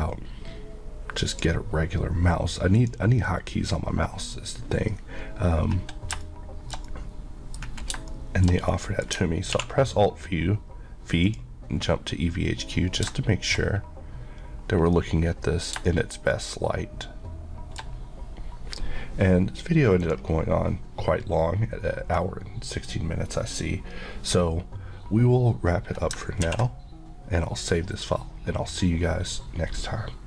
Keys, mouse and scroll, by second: 1.4 click, 6.3 shift+middle click, 7.7 scroll up 1, 8.2 shift+middle click, 9.6 alt+v, 11.3 click, 13.2 middle click, 13.7 scroll up 1, 15.8-16.4 scroll down 1, 16.4 middle click, 20.1 click, 26.4 ctrl+s.